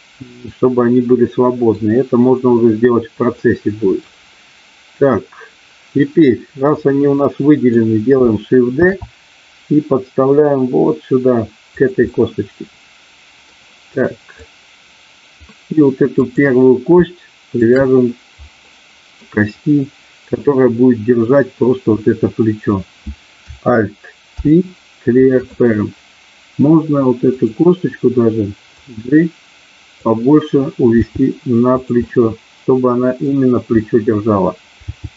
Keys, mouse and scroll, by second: 0.4-1.7 middle drag, 3.4 middle click, 6.7-7.7 middle drag, 8.7 shift+d, 11.7 click, 12.1-13.4 middle drag, 14.4-15.4 drag, 16.2 click, 17.7 shift+click, 18.7 middle click, 24.2 ctrl+p, 27.2 click, 28.7-29.9 drag, 31.0 g, 31.7 click, 32.0-33.2 middle drag, 34.9 g.